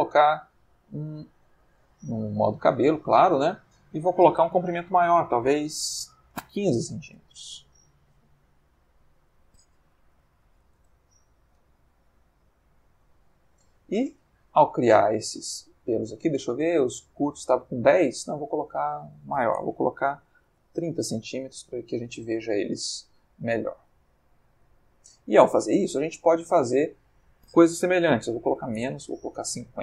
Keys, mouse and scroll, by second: 1.9 click, 3.7 click, 5.1 1, 6.5 5, 7.0 Return, 9.1 click, 9.8 1, 10.1 5, 10.4 c, 10.6 m, 10.7 Return, 13.1-13.8 ctrl+middle drag, 13.9-15.1 ctrl+middle drag, 15.5-15.9 ctrl+middle drag, 16.6 click, 17.9 click, 18.8 click, 20.4 3, 20.5 0, 21.2 c, 21.3 m, 21.6 Return, 22.8-23.9 ctrl+middle drag, 24.2-25.5 ctrl+middle drag, 27.1 click, 28.5 5, 28.6 0, 28.8 Return.